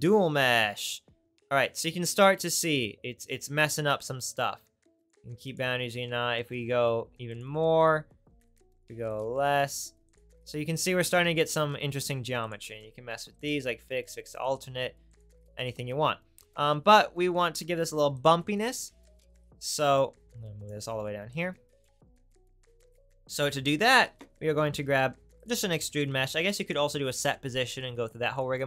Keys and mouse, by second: 2.1-5.0 right drag, 5.0 middle click, 5.1-7.3 right drag, 7.3-16.0 middle drag, 24.7 shift+a.